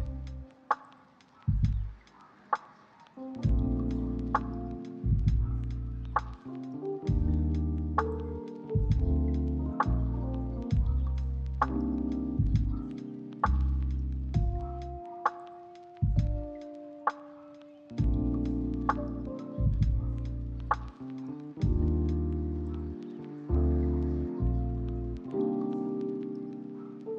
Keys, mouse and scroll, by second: 0.6 double click, 2.3 middle click, 3.1 double click, 6.2 shift+middle click, 6.5 shift+middle click, 7.4 double click, 9.4 ctrl+middle click, 10.1 ctrl+middle click, 10.5 shift+middle click, 11.0 ctrl+middle click, 12.9 double click, 14.0 ctrl+middle click, 14.6 middle click, 14.9 ctrl+middle click, 15.0 shift+middle click, 15.5 double click, 17.8 ctrl+middle click, 18.5 ctrl+middle click, 18.7 ctrl+middle click, 19.0 shift+middle click, 19.8 double click, 21.6 right click, 22.4 ctrl+z, 22.6 right click, 23.2 8, 23.3 Return, 23.6 double click, 24.8 ctrl+middle click, 25.5 right click, 25.8 double click, 26.2 middle click.